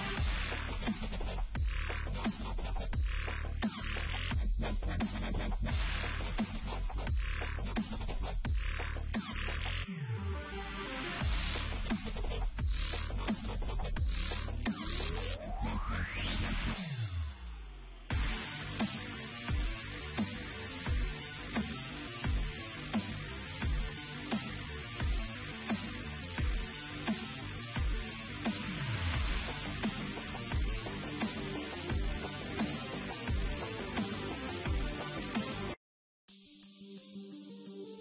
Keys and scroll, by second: 0.5 typing, 28.5 Delete, 29.5 ctrl+z, 31.1 Delete, 34.7 Return, 35.5 Return, 35.8 ctrl+alt+g, 37.0 ctrl+z.